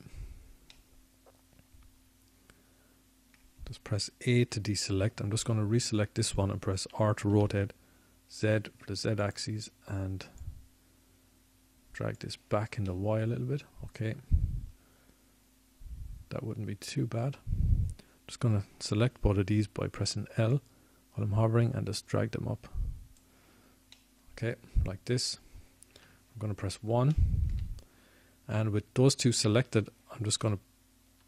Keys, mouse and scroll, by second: 4.5-7.9 middle drag, 9.6 a, 10.6 l, 12.0 r, 14.4-17.3 drag, 17.6 click, 18.0-20.0 middle drag, 24.4 l, 25.8 click, 31.1 KP_1.